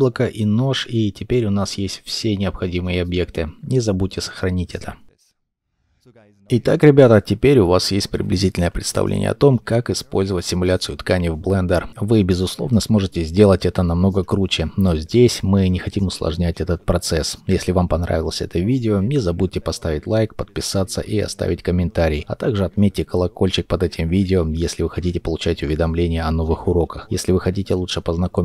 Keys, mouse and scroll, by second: 0.9 shift+middle click, 1.2 shift+a, 1.7 middle click, 2.9 shift+middle click.